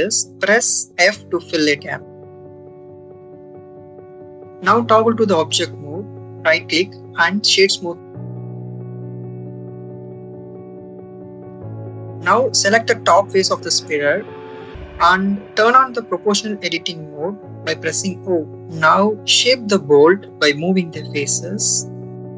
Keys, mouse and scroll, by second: 2.3 click, 3.9 click, 4.9 Tab, 7.6-9.6 right drag, 9.6 Tab, 10.3 click, 10.8 click, 11.6 ctrl+z, 12.3 3, 13.1 click, 18.2-22.2 drag.